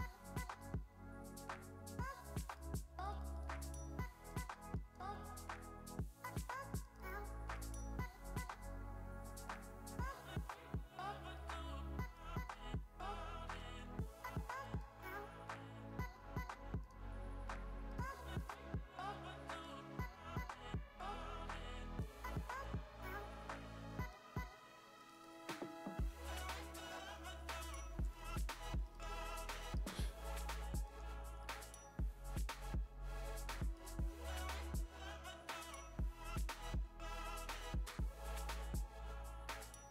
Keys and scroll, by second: 4.0 v, 4.6 space, 5.0 v, 13.7 super+z, 19.8 super+z, 26.4 super+z, 28.0-31.0 typing, 30.8 super+space, 33.1 x, 36.7 super+z, 39.5-39.9 typing.